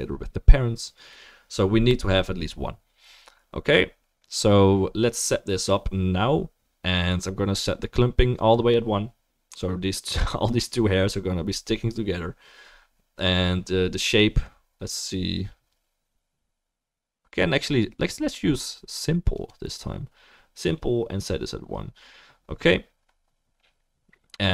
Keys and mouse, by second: 8.8-19.5 drag, 8.8-19.5 middle drag.